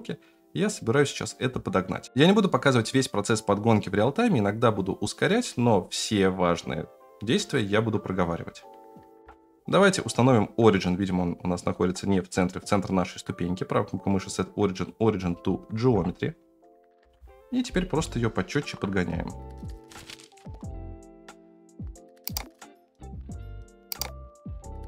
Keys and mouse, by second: 9.2 F9, 9.7-10.7 middle drag, 12.8-14.8 right drag, 15.9 KP_0, 17.0 F9, 18.0-18.5 shift+middle drag, 19.9 g, 21.9 s, 22.8 Tab, 23.0 3, 23.1 middle click, 23.2 g, 23.8 Tab, 24.6-24.8 typing.